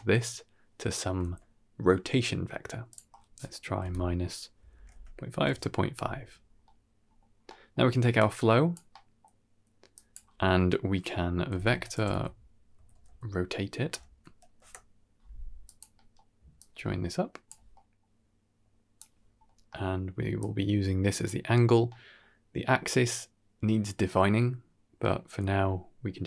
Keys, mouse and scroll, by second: 0.0 right click, 2.8-5.4 drag, 6.3 scroll down 2, 6.5 middle click, 7.2-7.6 scroll down 2, 7.3 middle click, 8.1 click, 8.8 middle click, 9.8-15.7 drag, 14.0 Down, 15.8 middle click, 16.4 click, 17.6 middle drag, 18.3 click, 19.3 middle click, 20.3 click, 21.8 middle click.